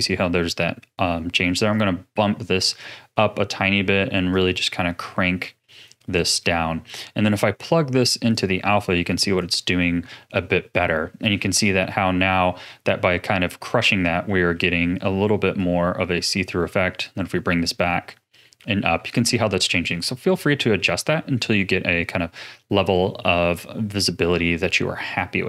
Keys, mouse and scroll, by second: 1.7-6.1 drag, 6.1 middle click, 6.6-7.3 scroll down 7, 7.3-8.3 middle drag, 8.3 click, 10.4-13.4 middle drag, 13.5-14.2 scroll down 3, 14.2-15.6 middle drag, 15.6-18.6 drag, 19.3 ctrl+z, 20.4-24.0 middle drag, 24.0 click.